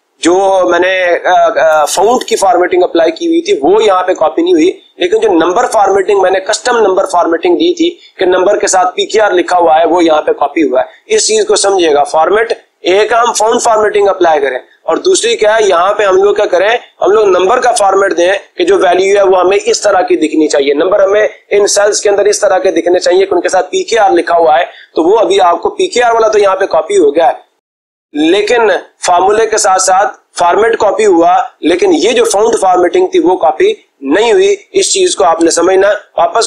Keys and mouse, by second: 35.7 ctrl+z.